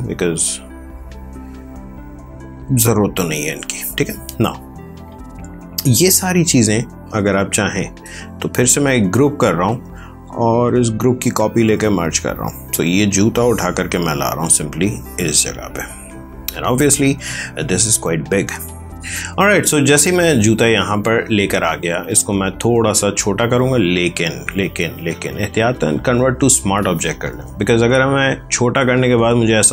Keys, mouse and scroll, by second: 6.5 shift+click, 8.6 ctrl+g, 10.5 ctrl+j, 11.6 ctrl+e, 13.0 click, 19.5 space, 20.1 ctrl+click, 22.1 ctrl+t, 22.7 Escape, 24.1 right click, 26.2 click, 28.4 ctrl+t.